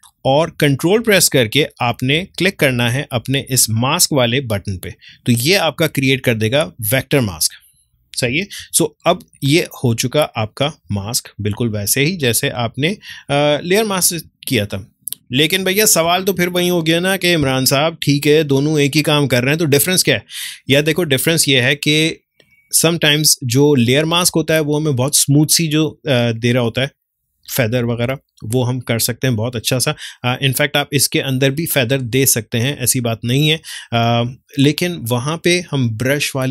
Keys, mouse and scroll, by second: 4.2 ctrl+click, 8.3 ctrl+click, 8.6 ctrl+d, 10.0 click, 10.9 ctrl+space, 11.2 ctrl+click, 11.4 ctrl+space, 13.4 click, 13.6 space, 14.4 ctrl+click.